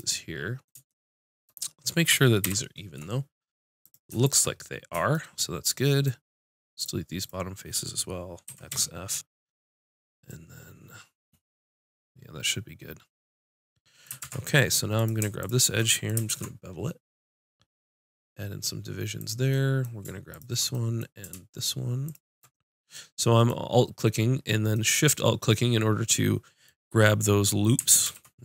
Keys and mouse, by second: 2.4 ctrl+KP_7, 6.7-9.0 drag, 8.4 x, 14.2 ctrl+Tab, 15.4-19.2 drag, 16.3 ctrl+b, 19.5-23.9 drag, 26.6 middle click, 28.1 ctrl+b.